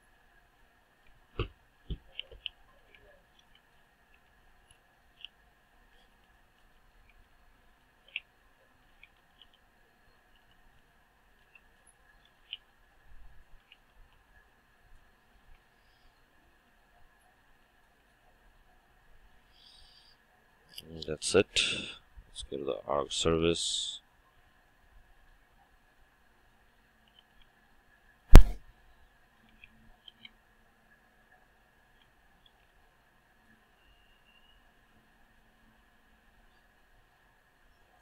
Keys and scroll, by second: 1.2 ctrl+w, 3.3 Return, 12.5 Tab, 15.3 ctrl+shift+Return, 28.5 Return.